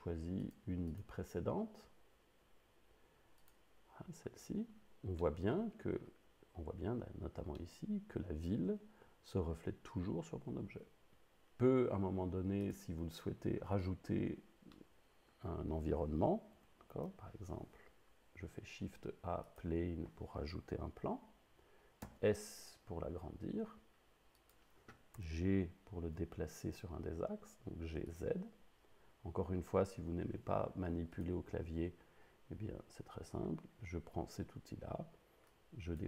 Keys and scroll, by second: 17.0 shift+a, 22.1 s, 25.2 g, 26.4 z.